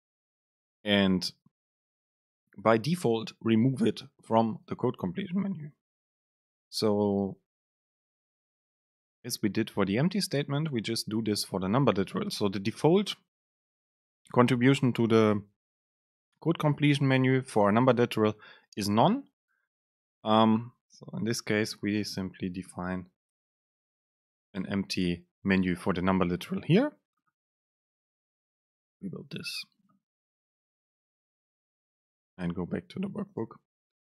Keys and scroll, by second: 22.7 super+space, 24.7 Down, 33.5 super+space.